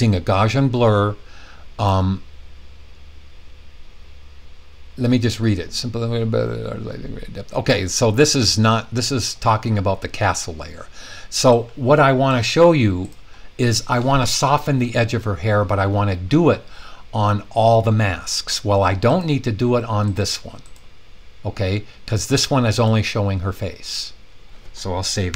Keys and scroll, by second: 25.2 super+s.